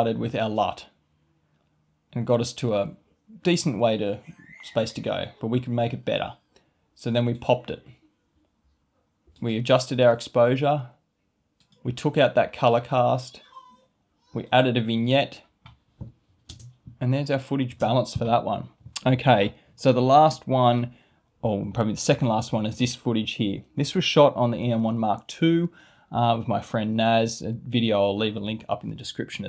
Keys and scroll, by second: 16.4 space.